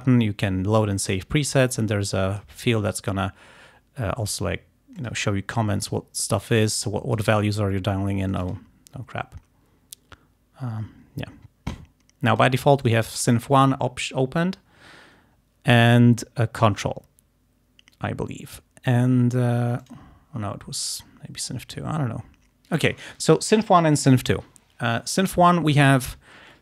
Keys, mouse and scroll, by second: 2.0 click, 5.1 click, 6.0-7.4 drag, 8.4 click, 12.4 click, 12.9 click, 19.9 click.